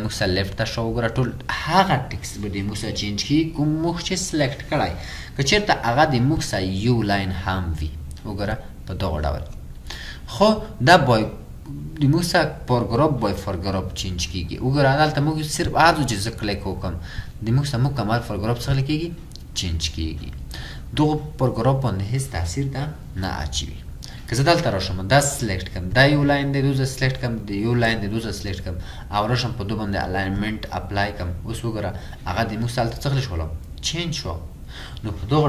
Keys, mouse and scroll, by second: 27.1 ctrl+click.